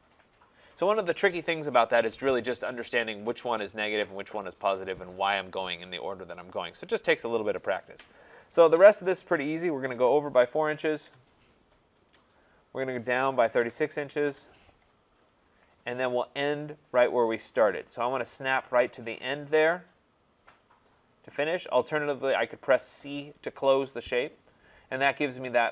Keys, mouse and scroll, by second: 2.4 Return, 10.0-11.4 typing, 12.1-14.3 drag, 13.2-14.0 typing, 14.2 Return, 15.3 click, 20.6 click, 23.9 click.